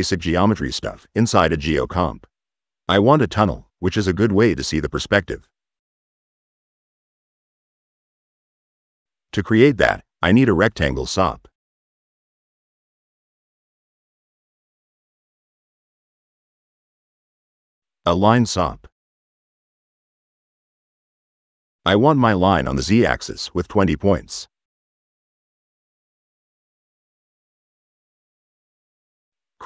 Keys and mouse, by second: 0.6-1.7 typing, 2.5 click, 3.0 click, 3.4 c, 4.1 click, 4.9 c, 5.1 click, 7.0 click, 7.5 Delete, 8.4 click, 8.6-9.6 typing, 9.6 click, 11.4-12.4 typing, 12.6 click, 13.2 click, 16.6 click, 17.9 i, 18.3 n, 19.4 click, 20.9 click, 22.4 drag, 23.7 click, 26.4 click, 28.3 click, 29.1 c, 29.5 o.